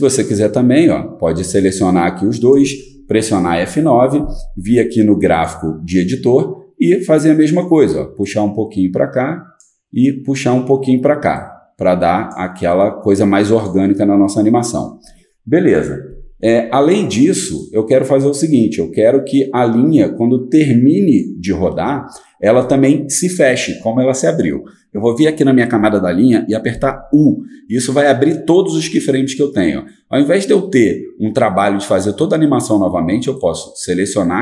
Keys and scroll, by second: 3.4 F9, 26.7 u.